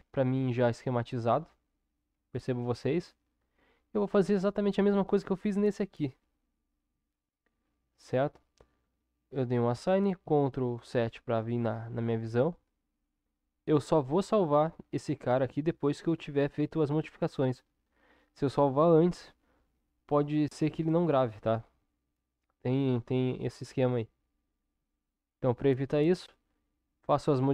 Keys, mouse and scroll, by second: 10.3 ctrl+KP_7.